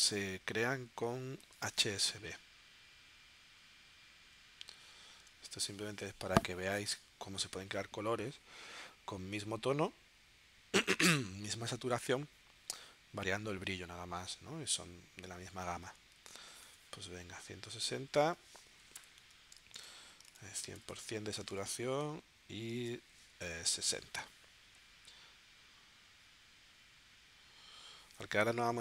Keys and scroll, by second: 1.6 super+Tab, 5.5 super+Tab, 16.8 super+Tab, 18.3 1, 20.4 super+Tab, 22.9 super+Tab, 23.3 6.